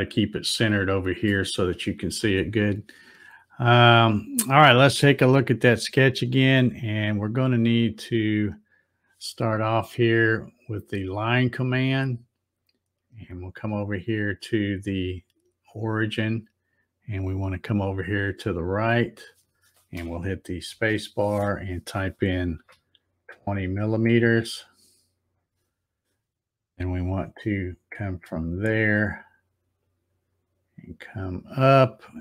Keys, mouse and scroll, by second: 5.5 scroll, 5.6 scroll, 5.7 scroll, 7.8 click, 11.8 click, 16.0-20.9 drag, 20.7 space, 29.8-32.2 drag.